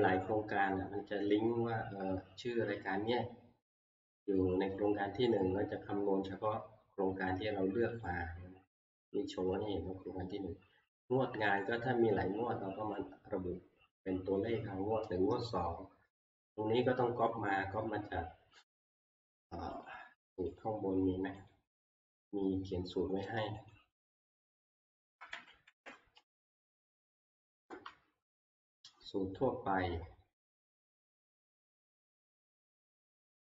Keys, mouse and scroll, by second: 0.0 ctrl+Page_Down, 8.0 click, 11.6 click, 19.9 click, 20.6 click, 21.5 click, 23.8 click, 24.5 F2, 25.3 Home, 26.7 typing, 27.6 Return, 32.7-33.4 drag.